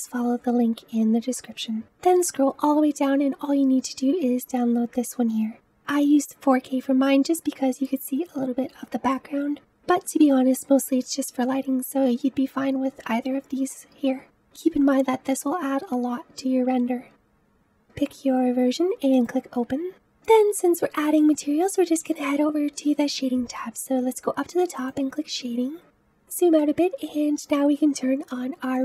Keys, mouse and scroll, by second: 19.9 click, 24.8 click, 26.0-26.5 scroll down 4, 26.5-28.8 middle drag.